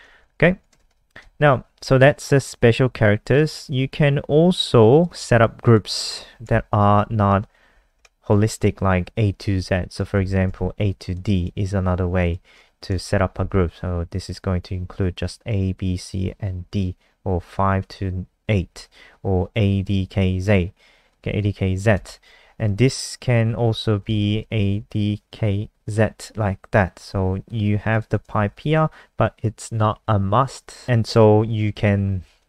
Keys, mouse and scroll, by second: 0.4 shift+Home, 0.7 BackSpace, 0.8 BackSpace, 1.8 click, 2.1-2.7 scroll down 2, 2.8-3.3 scroll down 1, 3.3 click, 5.2 ctrl+c, 5.3 click, 5.7 click, 6.3 Down, 6.5 shift+Home, 6.7 shift+Home, 7.7 shift+Up, 7.9 shift+Home, 9.4 ctrl+v, 9.9 click, 10.2 ctrl+s, 11.1 click, 13.0 ctrl+shift+Left, 21.1 click, 21.9 Return, 22.2 [, 23.7-24.8 typing, 26.1 ], 27.9 click, 28.4 shift+Right, 30.8 click.